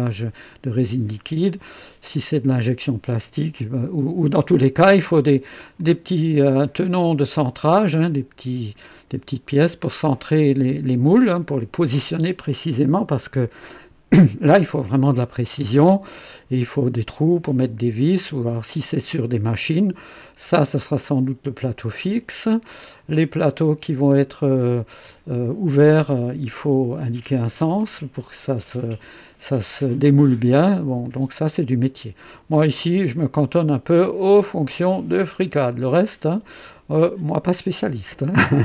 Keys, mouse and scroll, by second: 1.8-3.3 drag, 5.8-6.5 drag, 9.7-10.3 drag, 15.1-16.2 drag, 16.8 click, 18.1 click, 19.1-20.4 drag, 21.0-21.6 drag, 22.2 click, 23.1 click, 24.6-25.6 drag, 29.2-29.8 drag, 31.0-32.4 drag, 33.0 scroll up 1, 33.5-34.1 right drag, 35.2 scroll down 1, 35.7-36.7 drag, 38.5-38.6 drag.